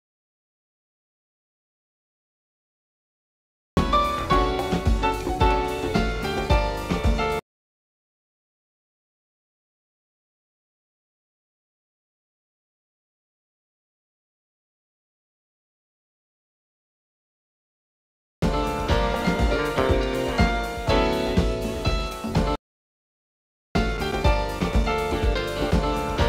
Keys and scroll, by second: 1.2-3.4 typing, 12.9-14.5 typing.